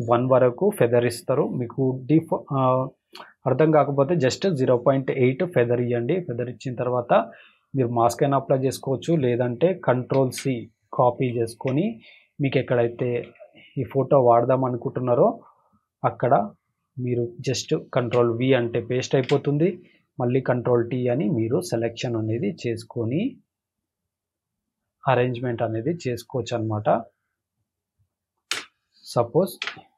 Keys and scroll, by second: 9.9 ctrl+c, 11.1 ctrl+Tab, 13.2 v, 17.7 ctrl+v, 19.1 ctrl+t, 28.5 Return, 29.6 Return.